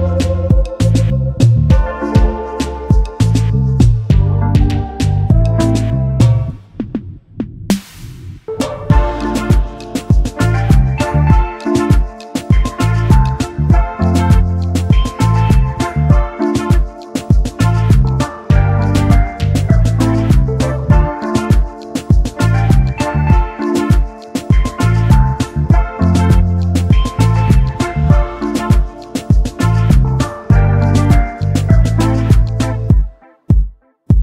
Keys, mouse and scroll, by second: 1.1-1.8 alt+scroll up 1, 1.9 alt+scroll up 1, 3.0-3.4 alt+scroll up 1, 3.6 double click, 5.1 right click, 7.7 alt+shift+click, 10.7 v, 12.5 shift+click, 14.6 double click, 18.3 ctrl+c, 18.6 ctrl+f, 20.1 alt+shift+click, 23.6 double click, 24.9 alt+scroll up 1, 27.2-29.6 scroll down 1, 30.1-30.6 alt+scroll up 1, 31.2 alt+shift+click, 32.6-33.0 alt+scroll down 1.